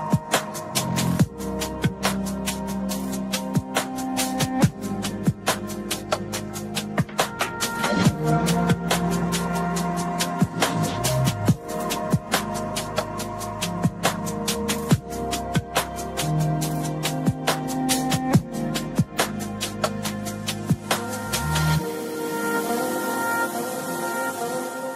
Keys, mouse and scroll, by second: 0.4 click, 0.4 s, 0.5 s, 2.7 click, 2.7 s, 3.7-4.7 drag, 6.2 click, 7.1 click, 10.3 s, 10.6-11.7 drag, 10.9-11.5 s, 11.7 s, 11.7 s, 12.9 click, 15.0 click, 15.7 click, 18.0 click, 18.9-21.1 drag, 22.9-24.4 drag.